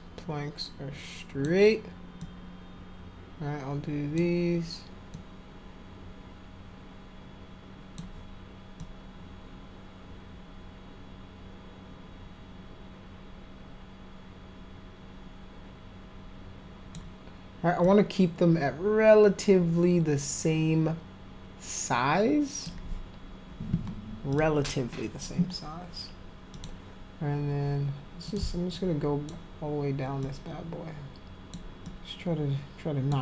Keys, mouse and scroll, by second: 2.2-4.2 alt+drag, 5.1-8.0 alt+drag, 8.8-16.9 alt+drag, 17.8-22.7 alt+drag, 24.3 click, 26.5 click, 28.3 click, 28.7 alt+click, 30.2-31.6 alt+drag, 31.8-33.1 alt+drag.